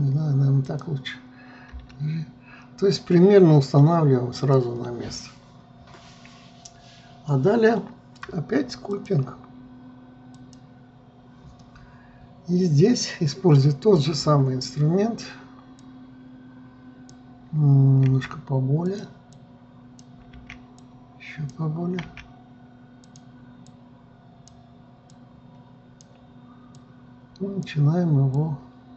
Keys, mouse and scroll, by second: 2.3 g, 9.5-12.5 drag, 14.9-15.2 scroll up 3, 16.3-18.6 drag, 18.6 f, 19.9 click, 20.9 f, 22.6 f, 24.2-28.9 drag.